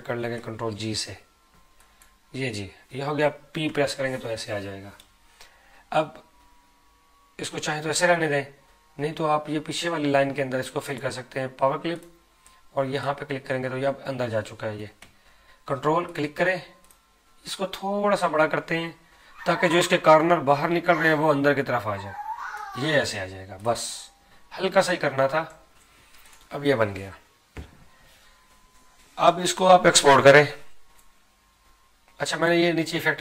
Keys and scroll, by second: 0.3 ctrl+g.